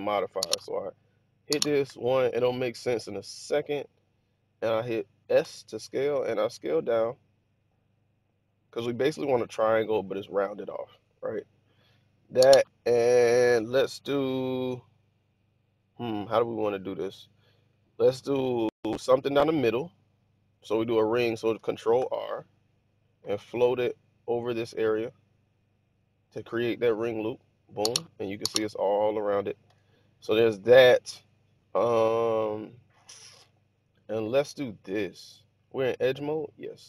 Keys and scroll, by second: 1.8 1, 5.3 s, 21.9 ctrl+r, 29.7 1.